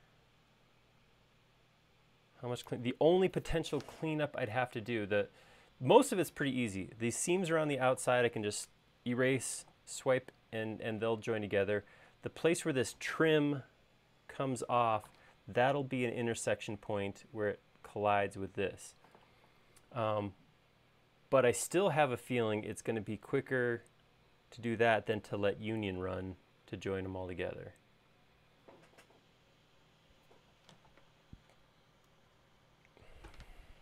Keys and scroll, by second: 32.9 Escape, 33.1 Escape, 33.3 Escape, 33.4 Escape, 33.6 Escape.